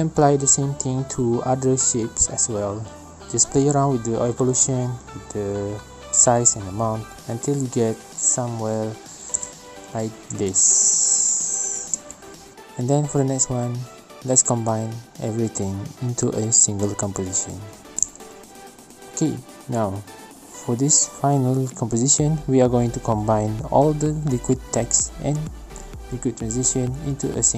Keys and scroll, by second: 5.7 space, 9.9 space, 11.5 space, 17.3 space.